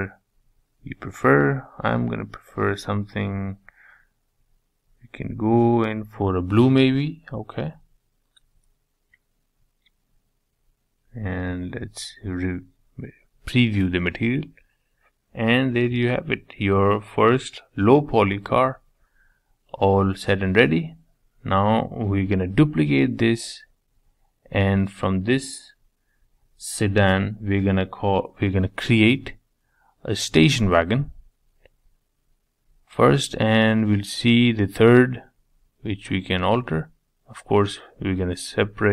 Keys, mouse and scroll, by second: 5.4 middle click, 6.2-7.5 scroll down 1, 7.5 click, 8.5 space, 9.1-10.8 middle drag, 10.8 z, 11.2-13.1 middle drag, 15.5 scroll down 1, 16.1-17.5 middle drag, 17.5 scroll down 3, 17.7-19.6 middle drag, 19.6 click, 20.4 shift+d, 23.3 shift+d, 24.9 shift+middle click, 25.4 scroll down 2, 25.7-27.4 middle drag, 27.4 click, 29.5 click, 32.1 click, 33.8-35.1 drag.